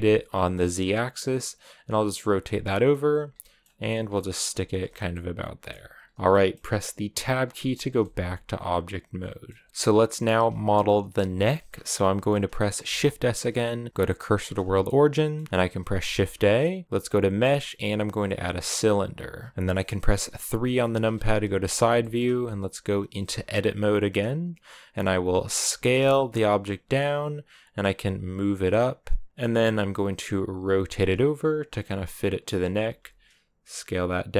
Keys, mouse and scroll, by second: 2.5 middle click, 2.9 g, 3.2 middle click, 3.6 g, 4.0 middle click, 4.4 g, 4.7 scroll down 4, 5.0 middle click, 5.7 g, 6.0 scroll down 1, 6.0 middle click, 7.0 Tab, 7.2 scroll down 4, 7.4 a, 7.8-14.4 shift+middle drag, 14.4 shift+s, 14.9-18.6 middle drag, 20.7 KP_3, 21.8 shift+middle click, 22.0-22.8 scroll up 4, 22.8 Tab, 25.5 s, 27.8 g, 30.4 r, 32.7 s, 34.1 g.